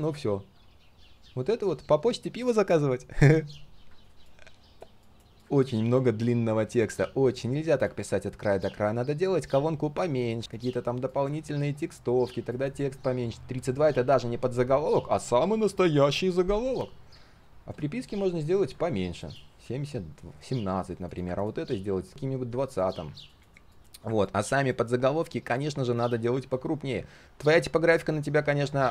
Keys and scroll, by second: 10.4 ctrl+c, 11.4 ctrl+v, 18.6 ctrl+a.